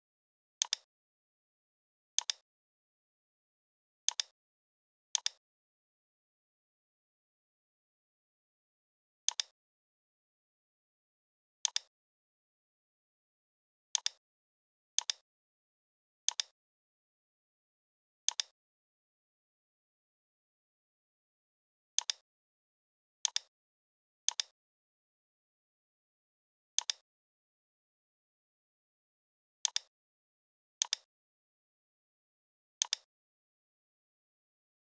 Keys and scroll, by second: 6.6 p, 13.1 a, 25.3 l, 27.5 shift+x, 28.9 v, 34.3 m.